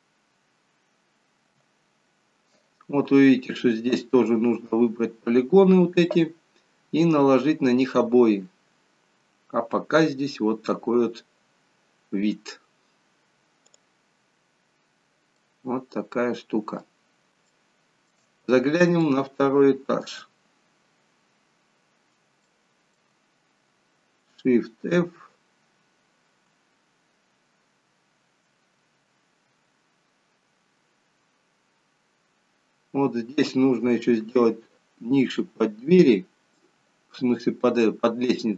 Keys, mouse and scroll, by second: 14.5-15.2 scroll down 3, 15.4 middle click, 15.4-17.3 scroll down 1, 17.5 shift+middle click, 18.3-19.4 scroll up 9, 19.4 shift+middle click, 20.7-21.5 scroll up 2, 21.5-22.5 scroll up 22, 22.5 shift+middle click, 24.8 shift+f.